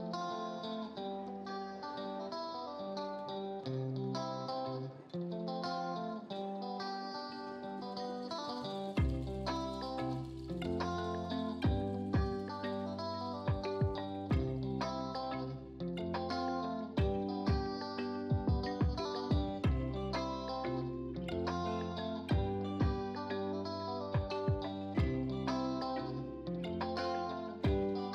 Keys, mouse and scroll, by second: 0.4 ctrl+a, 1.7 click, 2.8 ctrl+d, 3.8 Down, 6.8 shift+Down, 14.9 click, 17.3 right click, 18.3 click, 21.8 click, 24.6 right click, 26.1 click.